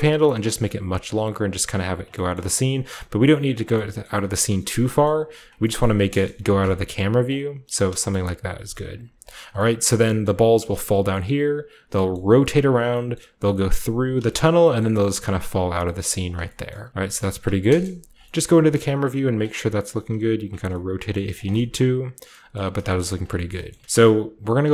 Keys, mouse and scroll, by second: 0.5-7.0 typing, 0.7 click, 1.2-2.0 scroll down 1, 1.5-7.0 drag, 2.7 middle click, 3.5 middle click, 4.1 middle click, 4.1-5.8 scroll up 1, 4.3 middle click, 5.0 middle click, 5.8-7.0 middle drag, 7.2-8.6 drag, 8.1 shift+middle click, 8.4 r, 8.6 r, 8.9 click, 9.1 g, 9.2 click, 12.1 middle click, 12.9-14.1 scroll up 1, 13.1-14.2 middle drag, 14.1-14.6 shift+scroll up 1, 14.4 shift+middle click, 14.8-15.8 middle drag, 15.9 middle click, 16.0-18.1 typing, 16.2 click, 16.7 middle click, 16.9 click, 17.0-17.6 scroll up 1, 17.1 middle click, 18.4 shift+scroll up 1, 19.3-21.2 typing, 19.9 click, 20.0-20.3 scroll up 1, 20.4 shift+click, 20.6-22.5 scroll down 1, 21.3 shift+click, 21.5-22.5 shift+middle drag, 22.5 Tab, 22.8 shift+scroll up 1, 23.3-24.0 typing, 23.5-24.6 scroll up 1, 23.7 shift+middle click, 23.8 shift+middle click.